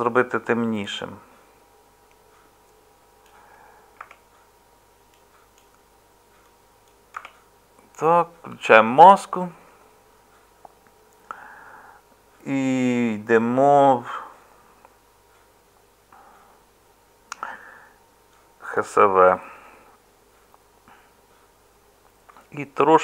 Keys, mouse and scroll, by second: 7.1 Tab.